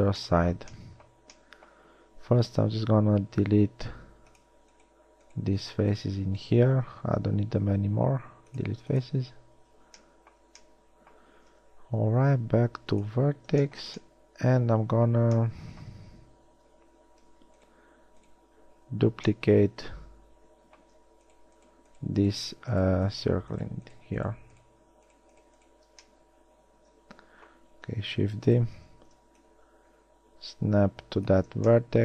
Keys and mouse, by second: 2.4 ctrl+Tab, 7.0 x, 9.9 a, 10.6 a, 12.2 ctrl+Tab, 26.3 middle click, 27.3 middle click, 27.4 middle click, 28.4 shift+d.